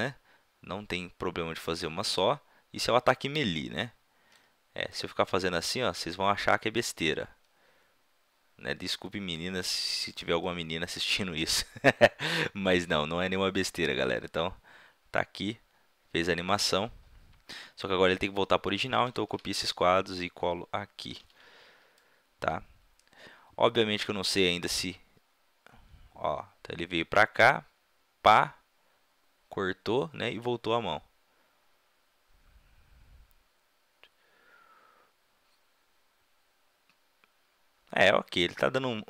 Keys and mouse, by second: 4.9-6.8 drag, 10.4-13.7 middle drag, 13.7-15.3 drag, 18.1-19.7 drag, 19.0 ctrl+c, 19.6 right click, 21.2 ctrl+v, 22.0-22.5 drag, 23.6-39.0 middle drag.